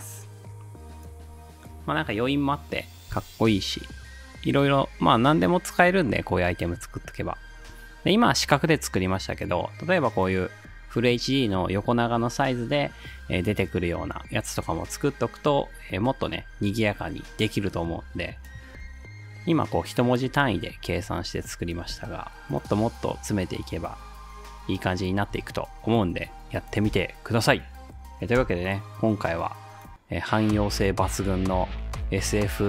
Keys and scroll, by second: 1.5 space, 18.7 space, 20.9 space, 21.8 space, 25.4 space, 26.9 space, 28.4 space, 32.2 space.